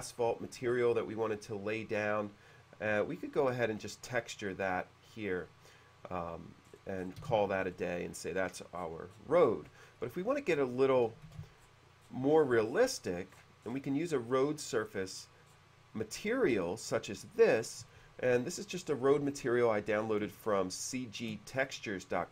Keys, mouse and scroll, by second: 1.8 click, 3.9 click, 5.2 click, 6.8-7.4 scroll up 2, 7.4 space, 7.7 middle click, 8.9-9.5 scroll down 2, 9.8 scroll down 1, 10.1 middle click, 11.5 shift+c, 11.7-12.4 scroll down 2, 12.8-13.1 scroll up 1, 13.4 scroll up 1, 13.5-14.1 scroll down 1, 14.2 middle click, 15.3-15.9 scroll down 1, 19.0-19.7 scroll down 2, 20.7 shift+middle click.